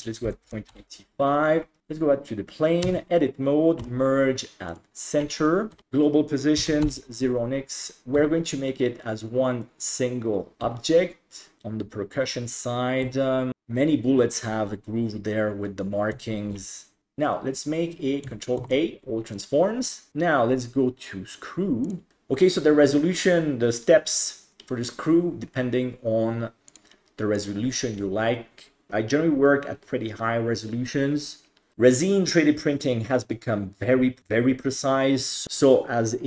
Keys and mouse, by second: 2.9 Tab, 3.8 m, 5.7 g, 5.8-6.9 drag, 8.2 e, 10.6 e, 13.1 e, 16.2 Tab, 18.6 ctrl+a, 20.1-21.9 drag, 26.7 click, 27.4-31.7 drag.